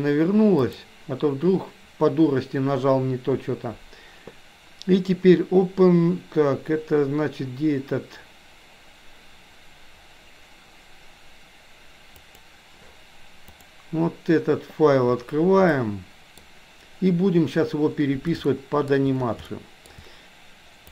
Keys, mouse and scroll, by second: 0.6-14.1 drag, 15.8 middle click, 18.5 shift+middle click, 19.5-20.0 shift+middle drag.